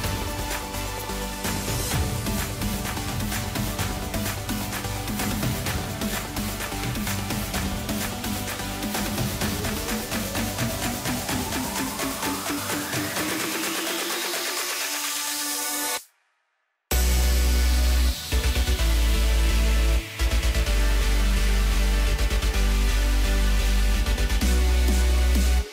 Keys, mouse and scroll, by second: 0.6 s, 2.8 g, 4.4-5.7 scroll up 7, 5.7 s, 7.9 g, 10.5 s, 13.7 g, 16.0 KP_3, 17.3 g, 19.9-20.4 scroll up 2, 20.4 s, 23.4 shift+a.